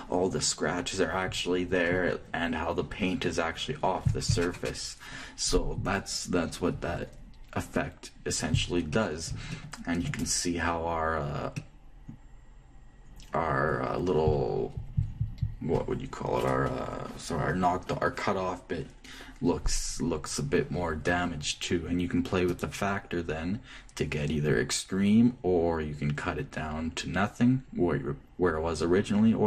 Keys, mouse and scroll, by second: 8.5 middle click, 9.6-14.0 middle drag, 23.0-25.0 drag.